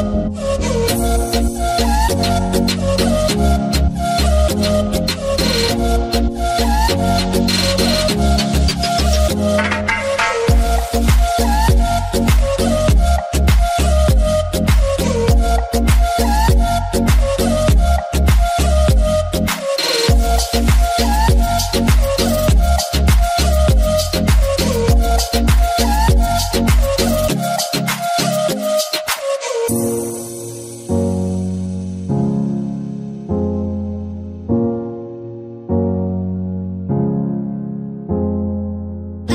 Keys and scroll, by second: 0.0-0.4 typing, 0.7 Return, 2.0-3.4 typing, 4.9-5.7 typing, 9.7 l, 11.8 l, 20.9-21.6 typing, 24.0 4, 24.3 Return, 30.6-31.5 typing.